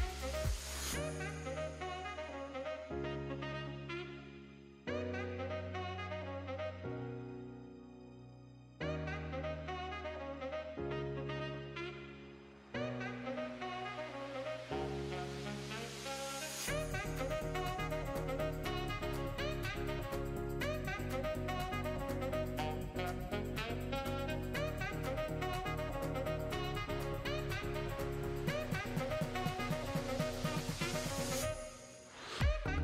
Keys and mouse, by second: 1.2 click, 2.4 ctrl+v, 2.8 click, 3.7 middle drag, 4.1 shift+middle click, 5.1 click, 5.5 click, 6.9 click, 7.7 click, 10.8 click, 12.5 shift+middle click, 13.2 middle click, 15.6 click, 16.5 middle click, 16.7 shift+middle click, 17.2 drag, 17.8 click, 19.6 click, 20.2 click, 20.7 click, 21.5 click, 21.7 middle click, 22.1 ctrl+s, 22.5 shift+middle click, 22.9 click, 23.4-24.5 drag, 28.7 click, 29.2 Tab, 30.7 ctrl+r.